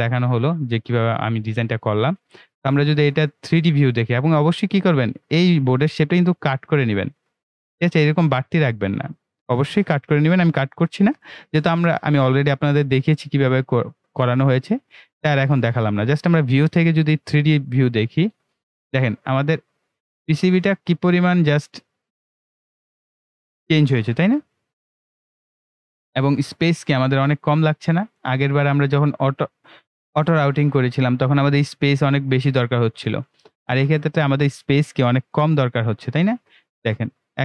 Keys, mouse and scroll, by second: 3.4 right click, 16.1 click, 18.3-21.1 right drag, 21.1-22.6 middle drag, 22.6-37.4 ctrl+right drag.